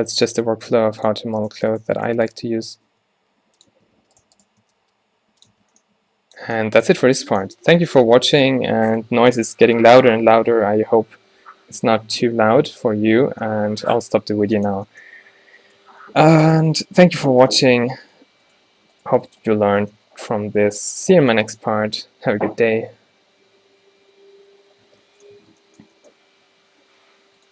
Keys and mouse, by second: 0.6 g, 1.6 g, 3.2 g, 3.8 Tab, 4.0 Tab, 4.7 g, 5.6 Tab, 5.7-6.1 drag, 15.4 a, 15.9 a, 17.4 Tab, 19.3 click, 19.8 g, 21.5 a, 23.6 ctrl+alt+t, 24.9 Tab, 25.5 Tab.